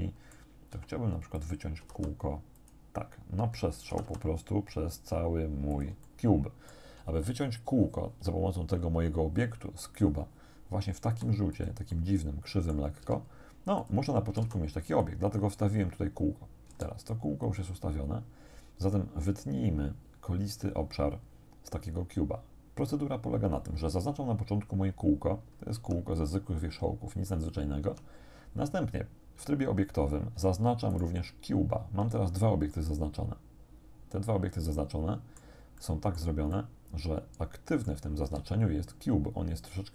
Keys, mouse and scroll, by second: 0.7 g, 1.4 click, 1.9 r, 2.6 click, 3.9 r, 5.7 shift+click, 6.1 shift+middle click, 11.1 s, 11.6 click, 11.9-12.9 middle drag, 13.1 g, 13.9 click, 14.3 r, 14.9 click, 16.7 s, 17.5 click, 25.8 Tab, 27.9 Tab, 30.9 shift+right click, 32.7-35.3 drag, 35.3-35.6 scroll down 2, 35.6 middle click, 35.8 click, 36.5-38.1 drag, 38.3 z.